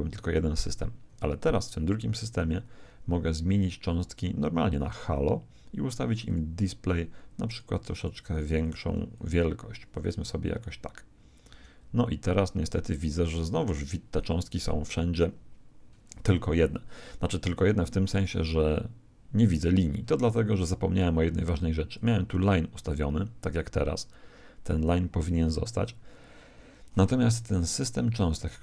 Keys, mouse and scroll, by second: 0.5 Escape, 2.2-4.8 middle drag, 4.8-10.9 drag, 10.0 alt+a, 21.9 click, 26.5-28.6 middle drag.